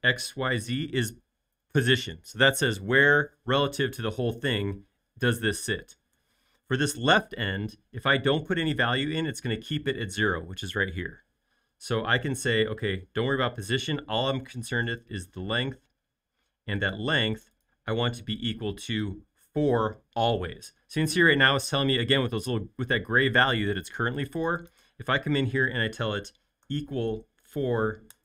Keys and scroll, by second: 27.0-27.4 typing, 28.1 Return.